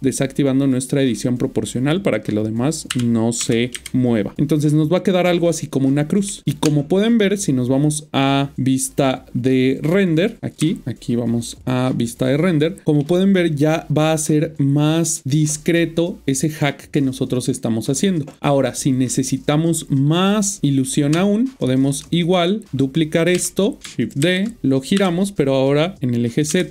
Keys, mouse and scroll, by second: 0.6 click, 2.9-3.9 typing, 4.3 Return, 5.3 middle click, 6.6-8.8 Tab, 10.2 click, 10.6-11.0 typing, 10.8 Tab, 11.4 click, 12.9-13.4 scroll down 1, 21.1-21.9 Tab, 24.2-24.9 typing, 24.6 right click.